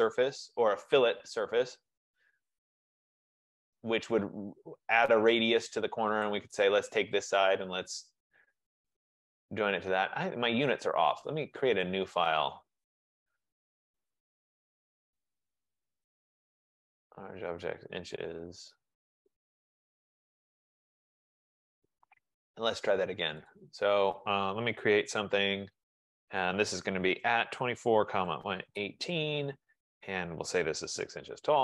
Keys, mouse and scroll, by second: 1.6-3.4 typing, 6.3 click, 7.2 click, 8.2-10.1 scroll, 10.4-12.1 scroll, 12.1 click, 12.9 click, 15.2 click, 17.3 F15, 17.5 click, 20.1 click, 23.6 click, 24.8-25.4 typing, 26.4-28.6 drag, 26.9-28.9 typing, 30.2-31.6 typing.